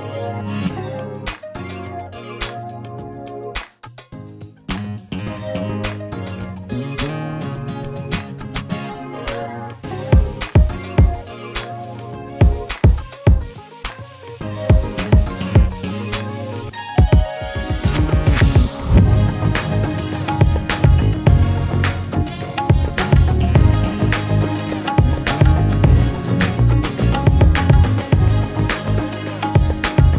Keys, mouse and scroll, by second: 15.3-19.8 drag, 19.8-20.8 scroll down 5, 20.0 click, 23.8-25.3 drag, 25.3-26.1 scroll down 1, 27.6 click, 28.1-28.8 scroll up 6, 28.8-29.4 scroll down 14, 29.4-30.1 drag.